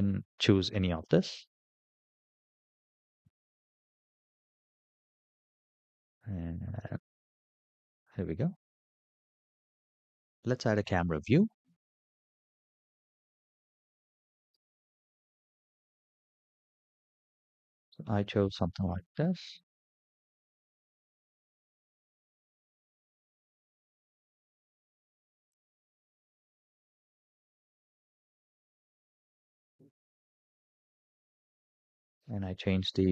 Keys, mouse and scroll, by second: 2.4 typing, 3.2-3.5 scroll up 5, 4.6-4.9 shift+middle drag, 5.2-5.7 scroll up 5, 6.2-6.6 middle drag, 6.9-7.4 shift+middle drag, 7.7 scroll up 4, 12.7 scroll down 2, 14.3 n, 14.9-15.2 scroll down 5, 15.6-16.2 middle drag, 16.8-17.2 shift+middle drag, 17.4-19.0 middle drag, 19.3-19.7 shift+middle drag, 22.4 click, 23.0 click, 23.9 shift+a, 27.6 ctrl+alt+KP_0.